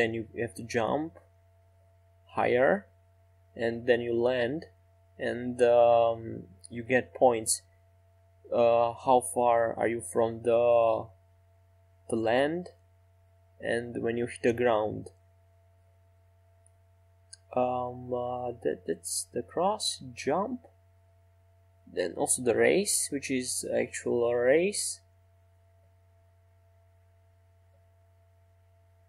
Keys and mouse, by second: 12.8 middle click, 14.2 Tab, 15.2-20.7 middle drag, 23.1-24.4 middle drag, 26.0 right click.